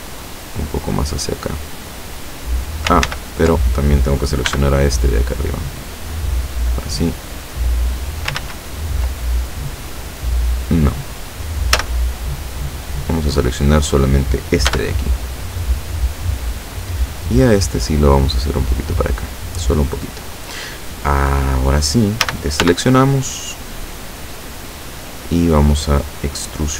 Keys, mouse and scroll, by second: 3.1 ctrl+z, 4.6 b, 5.2 click, 6.8-8.5 drag, 8.4 ctrl+z, 11.8 a, 14.8 b, 16.0 click, 17.3-19.0 drag, 22.3 a, 22.7 b, 23.0-25.4 drag.